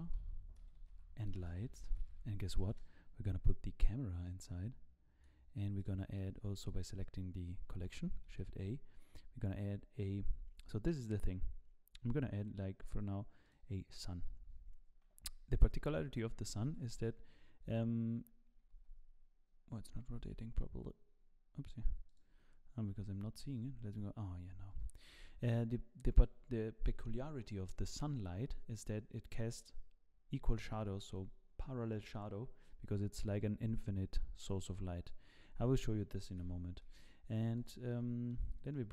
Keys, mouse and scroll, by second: 4.2 click, 5.8 click, 8.3 shift+a, 13.9-14.3 scroll down 5, 16.5 r, 23.1 t, 23.3 z, 23.8-24.7 scroll up 2, 24.7 scroll up 1, 24.7 r, 36.3 g, 37.9 middle click, 38.5-38.9 scroll down 2, 38.7 middle click.